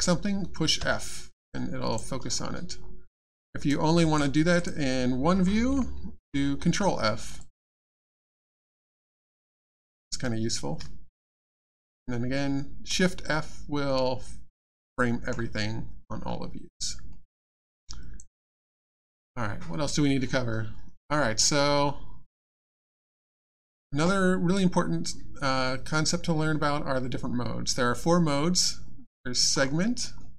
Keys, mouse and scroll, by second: 1.3 alt+f, 1.5 alt+click, 2.7-3.1 alt+scroll down 2, 3.7 alt+click, 4.6 click, 4.6 click, 7.2 ctrl+f, 7.4 alt+click, 8.1 alt+middle click, 8.2-8.6 alt+scroll down 1, 9.0 alt+middle click, 9.3 alt+scroll down 2, 11.3 shift+f, 13.8 scroll up 1, 14.7 middle click, 16.2-17.1 scroll up 1, 17.1 middle click, 17.7 alt+click, 18.4 alt+middle click, 18.7 alt+scroll down 1, 29.5-30.0 scroll up 1, 30.0 scroll down 1.